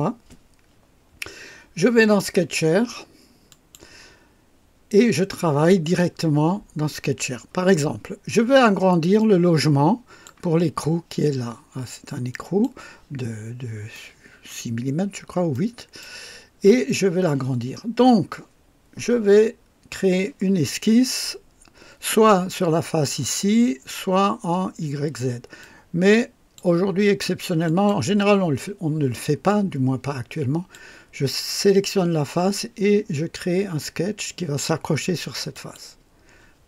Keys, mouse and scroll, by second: 2.0 click, 3.5 click, 9.2-10.4 drag, 12.3 click, 13.4 scroll up 2, 13.9-14.7 right drag, 15.0 scroll down 2, 15.5-16.2 right drag, 25.6-26.8 drag, 27.6 click, 29.5-30.9 drag, 35.5 click.